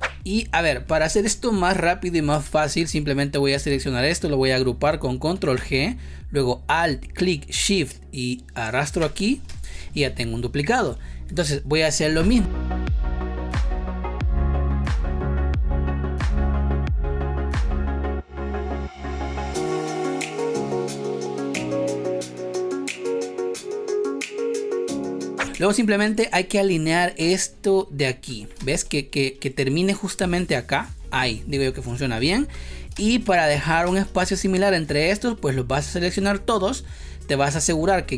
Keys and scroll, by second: 2.3 space, 5.4 ctrl+g, 9.4 space, 13.9 ctrl+c, 15.1 space, 15.3 ctrl+v, 16.0 v, 17.5 Delete, 18.0 space, 20.1 space, 21.5 ctrl+c, 22.5 ctrl+v, 24.2 Delete, 24.5 space, 25.9 space, 28.4 space, 32.2 Delete, 32.8 space, 33.8 space.